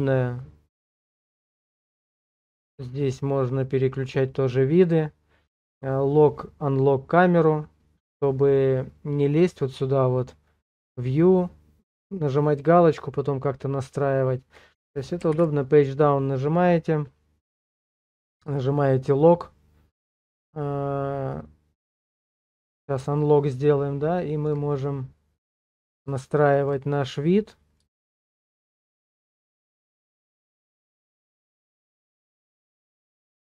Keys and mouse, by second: 10.7 click, 15.3 Page_Down, 23.2 shift+middle click, 24.8 middle click, 26.2 shift+middle click, 27.0 middle click, 28.1 shift+middle click, 29.2 shift+middle click, 31.0 ctrl+middle click, 32.8 shift+middle click.